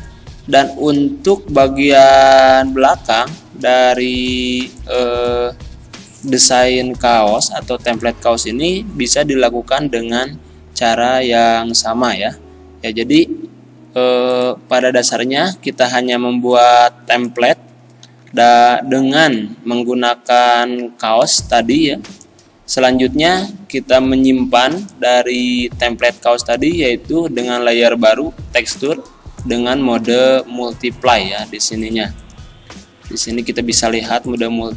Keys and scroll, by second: 11.6 z, 18.1 ctrl+g, 19.0 ctrl+z, 21.2 z.